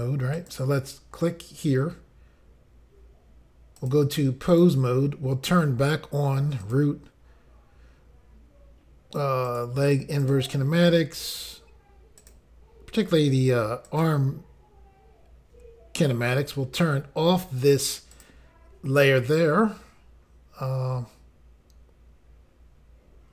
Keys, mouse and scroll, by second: 0.3 click, 0.5 click, 1.0 scroll down 1, 3.8 click, 3.9 click, 4.5 click, 4.6 click, 6.6 click, 9.5 click, 10.2 click, 12.2 click, 13.9 click, 18.1 click.